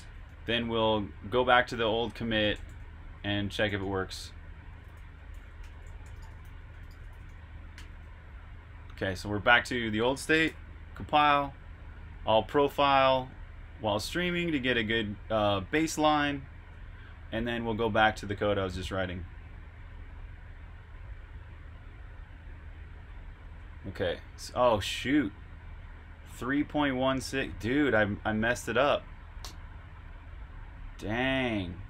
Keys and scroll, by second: 0.0-2.4 typing, 3.7-7.4 typing, 9.4-11.5 typing, 15.9 super+Tab, 23.4 super+q.